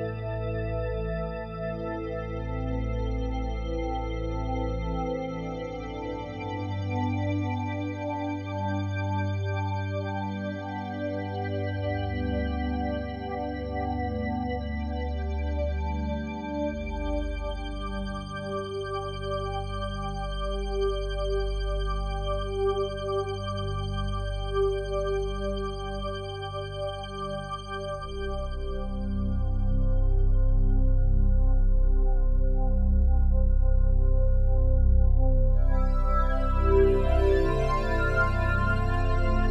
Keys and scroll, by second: 3.0 alt+Delete, 4.6 ctrl+d.